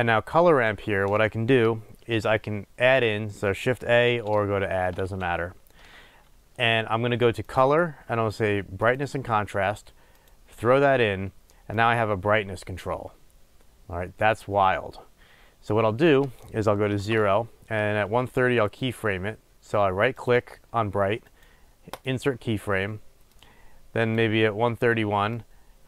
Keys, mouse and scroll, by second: 10.5 click, 12.2-22.3 drag, 17.4 Return, 22.3-23.6 right drag, 23.6-25.8 drag.